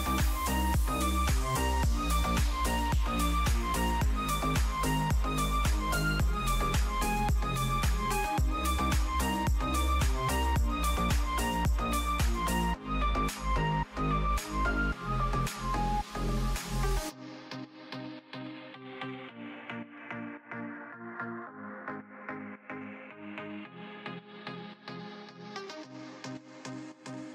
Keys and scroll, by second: 16.8 space, 18.7 ctrl+z, 21.7 ctrl+z, 25.4 space.